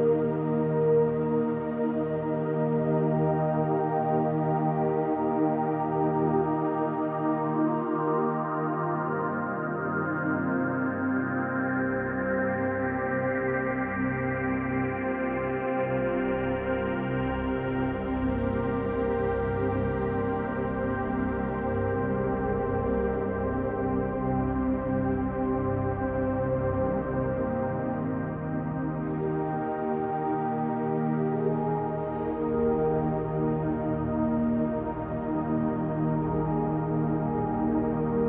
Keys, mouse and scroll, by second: 0.3-1.9 middle drag, 1.9 typing, 2.3 middle click, 5.6 KP_7, 6.9 KP_3, 8.3-9.0 shift+middle drag, 9.3-10.9 scroll up 3, 10.9 r, 13.1 x, 16.4 click, 16.8-17.5 scroll down 3, 17.5-17.9 middle drag, 18.2-18.5 scroll up 2, 18.5 middle click, 19.9 i, 21.1 Escape, 21.4 scroll up 2, 23.0 ctrl+z, 24.7-25.6 middle drag, 26.7 ctrl+shift+z, 27.9-28.4 scroll down 1, 28.5-28.9 shift+middle drag, 29.1-29.5 scroll up 1, 29.5-30.0 middle drag, 30.9 f, 31.5-33.1 middle drag, 34.0 i, 36.5 click, 37.0-37.8 middle drag, 38.1-38.2 scroll down 1.